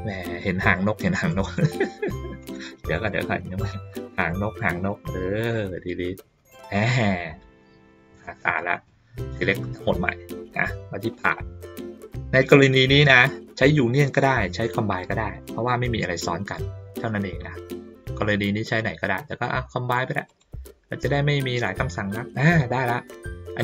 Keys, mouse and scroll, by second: 1.4 click, 2.4 click, 3.1 ctrl+middle click, 4.1 click, 7.3 ctrl+middle click, 8.2-8.6 ctrl+middle drag, 8.8 click, 11.1 click, 20.2 click.